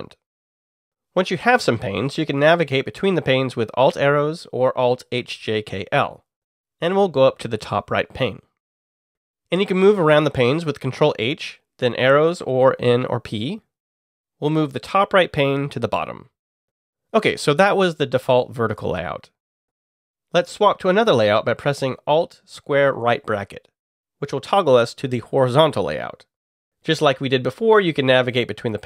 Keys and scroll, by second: 0.0-0.3 typing, 6.7 alt+Up, 7.1 alt+Up, 12.3 ctrl+h, 13.9 Down, 14.5 Page_Down, 15.3 Return, 22.8 alt+], 28.7 alt+Left.